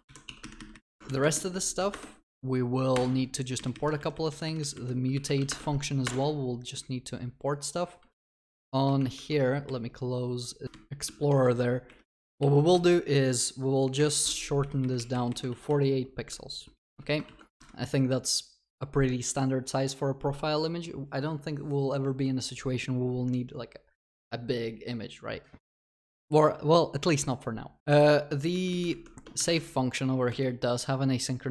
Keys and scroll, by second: 0.0 ctrl+v, 1.9 alt+Return, 12.2 ctrl+w, 17.3 ctrl+s, 29.5 alt+Return.